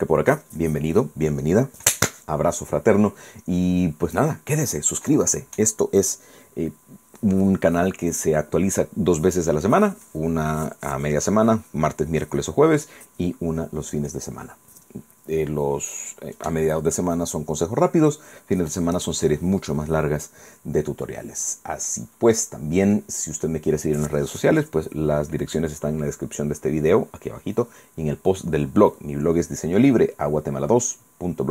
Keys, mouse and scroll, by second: 20.5-20.9 scroll down 2, 21.1-22.1 drag, 22.3-22.7 scroll up 4, 23.0-27.3 scroll down 2.